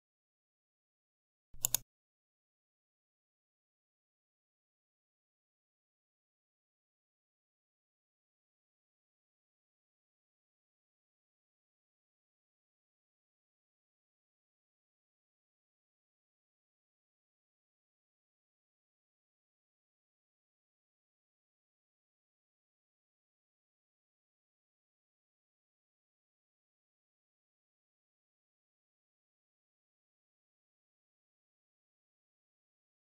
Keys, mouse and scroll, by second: 1.5 click, 30.7 click.